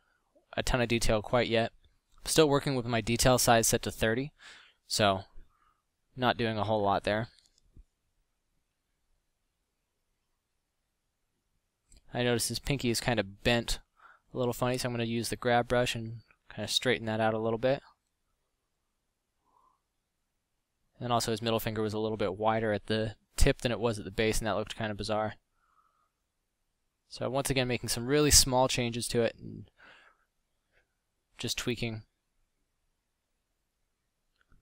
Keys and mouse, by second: 2.1 middle drag, 12.6-14.8 middle drag, 14.3 f, 17.0 middle drag, 21.8 f, 23.4 f, 24.5 f, 26.4 f, 28.0 f, 32.9 f.